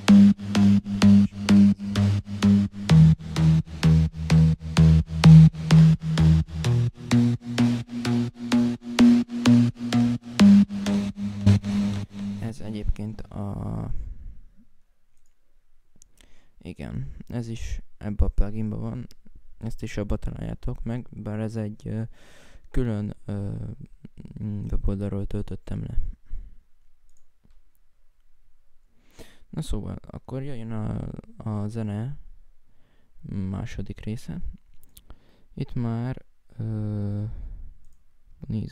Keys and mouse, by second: 9.6 c, 9.9 space, 9.9-11.3 right drag, 11.2 BackSpace, 11.8 F5, 12.6 F1, 12.6 right click, 21.8 click, 23.8 ctrl+l, 23.8 double click, 24.3 Escape, 25.1 F1, 25.5 F1, 26.8 right click, 30.3 right click, 33.7 right click, 34.4 right click, 37.6 right click.